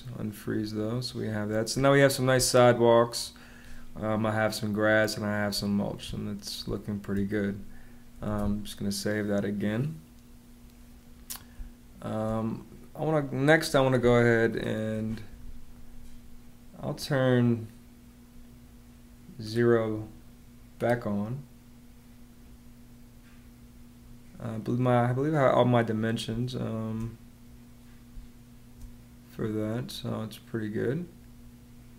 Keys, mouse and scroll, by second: 1.6 space, 5.4 space, 8.1 shift+super+s, 11.4 space, 26.2 space, 28.0 space.